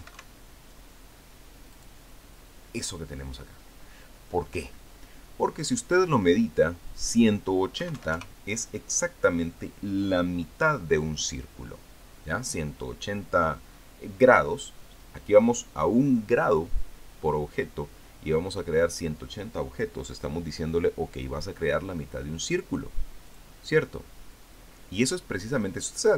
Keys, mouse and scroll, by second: 0.0 click, 0.8 KP_7, 0.9 KP_5, 2.6 click, 7.7 click, 8.6 KP_1, 8.8 KP_8, 9.0 KP_0, 24.1 click.